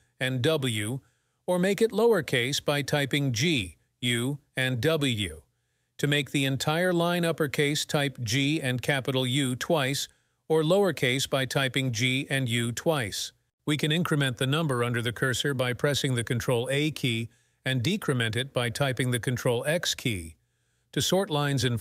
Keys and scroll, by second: 1.4-2.1 typing, 8.0-8.7 typing, 11.4-12.2 typing, 14.9 ctrl+a, 17.9 ctrl+x.